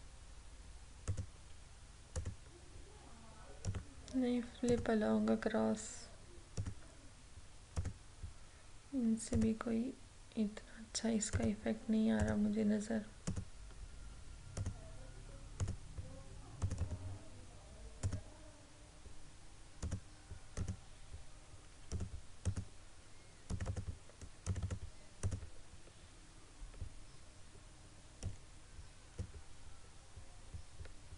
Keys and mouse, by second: 28.3-30.7 drag.